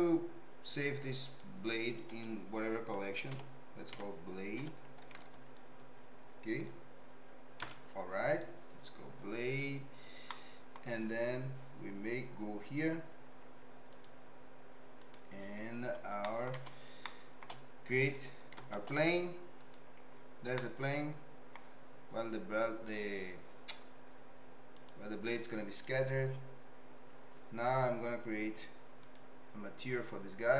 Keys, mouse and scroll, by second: 10.3 middle click, 16.3 middle click, 17.0 shift+middle click, 18.1 shift+right click, 18.5 shift+a, 20.6-21.6 middle drag.